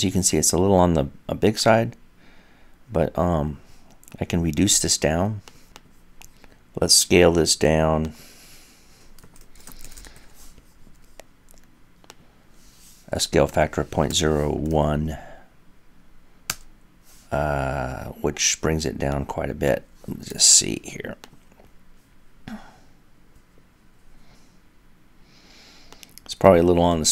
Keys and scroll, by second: 7.6 typing.